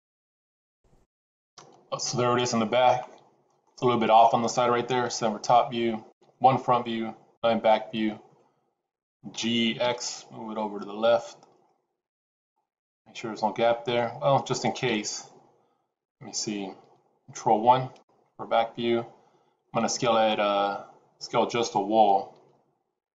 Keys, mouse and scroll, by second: 2.8 middle click, 5.0 KP_7, 6.0 KP_1, 7.2 KP_9, 8.2-9.1 scroll up 3, 9.2 g, 12.5 middle click, 14.7 KP_1, 17.3 ctrl+KP_1, 22.2 g.